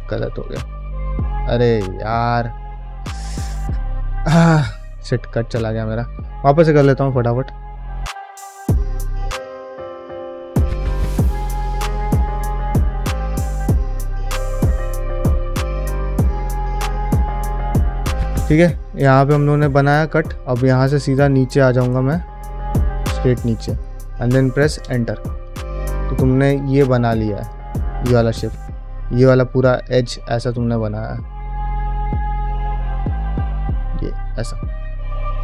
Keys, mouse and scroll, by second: 0.9 ctrl+z, 1.9 ctrl+shift+z, 2.4 ctrl+middle click, 2.6 middle click, 3.0 shift+middle click, 3.7 ctrl+middle click, 26.3 ctrl+middle click, 26.4 a, 26.8 middle click, 26.9 a, 27.3 click, 27.7 shift+middle click, 28.1 middle click, 28.6 2, 29.0 click, 29.8-31.0 ctrl+drag, 32.4 ctrl+click, 33.4 shift+click, 34.4 ctrl+middle click, 34.6-35.4 middle drag.